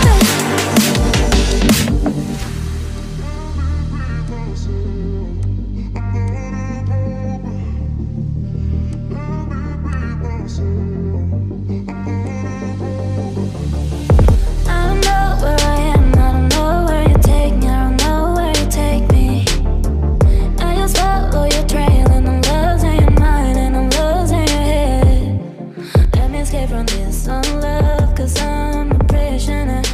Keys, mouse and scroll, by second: 2.3 ctrl+click, 13.4-14.3 ctrl+scroll down 1, 14.3 ctrl+z, 15.3 ctrl+scroll down 1, 15.7-16.4 scroll up 1, 16.4-17.2 ctrl+scroll up 1, 17.3-18.9 ctrl+scroll up 1, 27.2 right click.